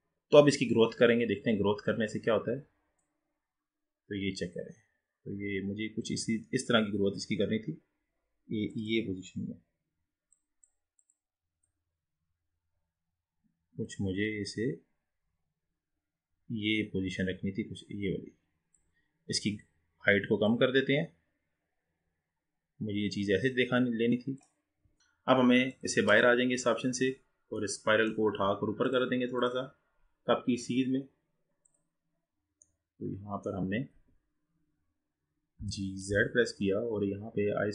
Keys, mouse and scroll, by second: 0.0-0.3 scroll up 1, 3.0-11.2 drag, 11.7-14.7 drag, 20.5-23.5 drag, 25.0-25.7 scroll up 8, 25.7 click, 26.1 click, 26.9-27.7 scroll down 3, 27.7-28.9 middle drag, 28.9-31.9 drag, 32.5-32.9 scroll down 4, 32.9-34.0 middle drag, 34.0 KP_1, 35.7 g.